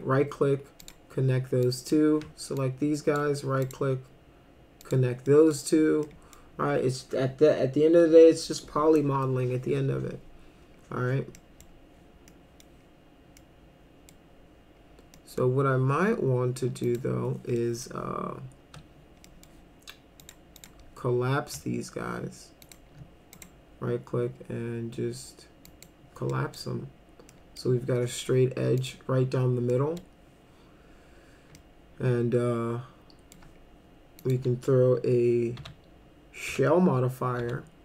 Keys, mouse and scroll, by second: 0.8 click, 1.6 drag, 2.6 ctrl+click, 3.6 right click, 4.8 click, 5.3 middle drag, 6.1 middle drag, 11.4 middle click, 12.3-12.6 middle drag, 13.4-14.1 middle drag, 15.2 middle click, 16.8 click, 17.6 middle click, 19.3 middle click, 20.2 click, 20.6 click, 22.7 ctrl+click, 23.4 right click, 25.6 click, 26.3 middle drag, 27.3 middle click, 28.8 click, 29.7 middle click, 31.6-33.3 alt+middle drag, 34.2 click, 35.6 s, 36.5 s, 37.4 s.